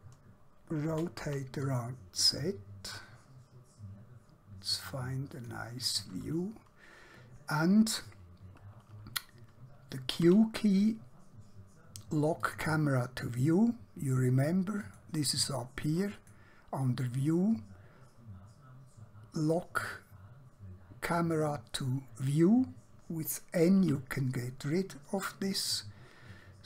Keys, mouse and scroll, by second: 1.0 r, 1.2 z, 5.4 click, 10.3 q, 12.5 click, 14.9 click, 23.9 n.